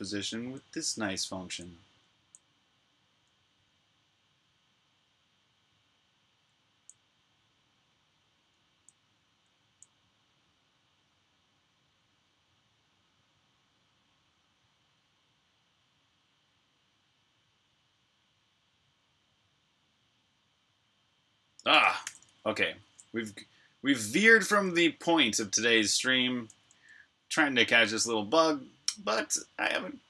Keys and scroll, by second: 0.0-2.8 typing, 6.3-6.7 typing, 8.6-9.5 typing, 11.7 typing, 21.8 super+j, 24.3 super+j.